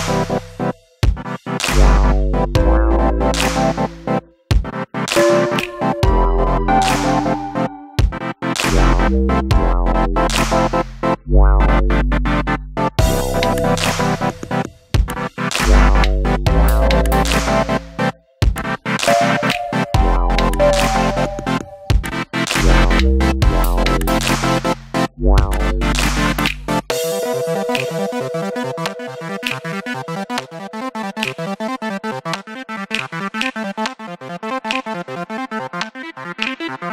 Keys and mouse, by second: 2.9 g, 4.7 click, 5.2-6.3 middle drag, 6.7 Tab, 7.5-8.4 middle drag, 9.8-11.7 typing, 10.5 click, 12.5 click, 14.3 ctrl+space, 15.0-15.8 middle drag, 16.3 KP_1, 17.7 shift+d, 18.0 g, 18.2 z, 19.3 click, 19.7 s, 20.3-20.6 drag, 20.6 g, 20.9 click, 21.3 s, 21.6 drag, 21.8 g, 22.3 click, 24.7 alt+d, 26.6 click, 29.0 Tab, 29.4 s, 30.2 right click, 31.1 a, 31.8 s, 32.7 click, 32.9 g, 33.7 click, 34.6 s, 34.7 z, 35.6 click, 36.0 middle click.